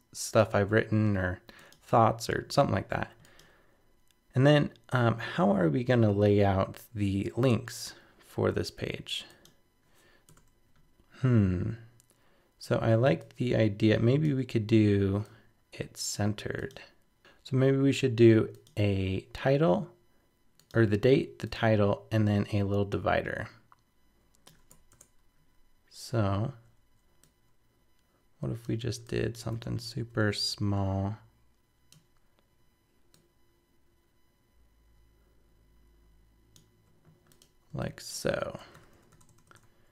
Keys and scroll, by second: 38.7 super+-.